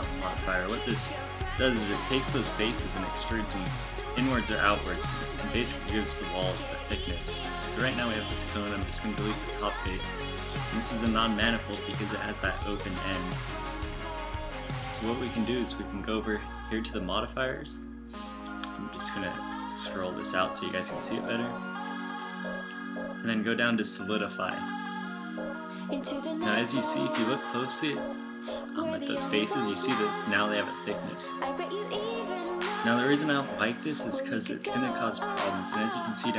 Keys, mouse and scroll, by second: 1.3 Tab, 6.2 ctrl+alt+shift+m, 7.6 f, 9.0 z, 10.1 a, 15.2 a, 16.3 Tab, 19.7 t, 20.1 n, 21.8-23.1 middle drag, 27.8 middle click, 35.2 middle click.